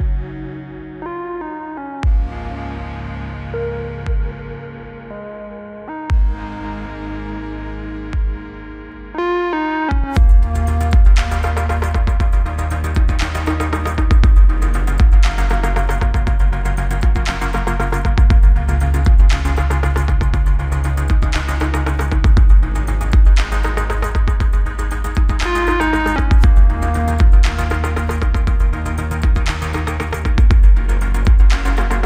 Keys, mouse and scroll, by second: 1.5 ctrl+d, 2.6 click, 3.1 ctrl+d, 4.4-7.1 click, 10.5-11.2 scroll down 1, 11.4-12.0 click, 18.3 click.